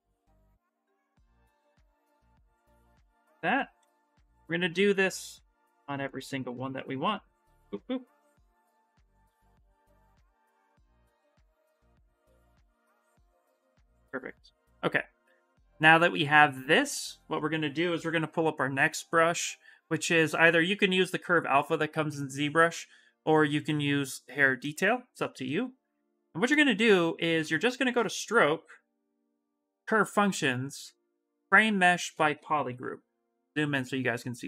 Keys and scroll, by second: 17.7 b, 25.2 s, 32.4 shift+m.